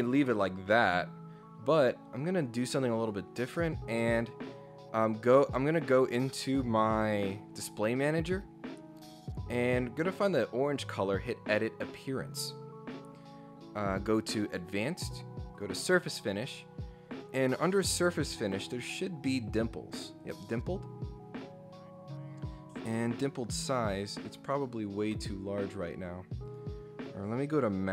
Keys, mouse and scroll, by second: 3.0 click, 9.5 right click, 10.7 click, 14.5 click, 15.5 click, 17.1 click, 20.2 click, 23.1 click, 24.0 click, 24.6 click, 26.4 click.